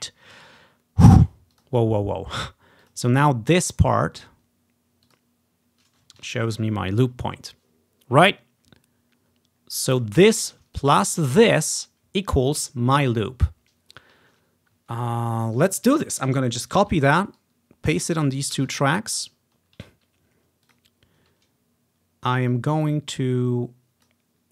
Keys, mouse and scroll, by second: 1.6-2.9 drag, 3.0 click, 5.1 click, 6.6 ctrl+i, 9.9 click, 10.8 click, 15.7 ctrl+scroll down 2, 16.9 ctrl+c, 17.4 click, 18.6 ctrl+v, 19.5-20.8 ctrl+scroll up 3, 20.7 click, 22.6-24.2 drag.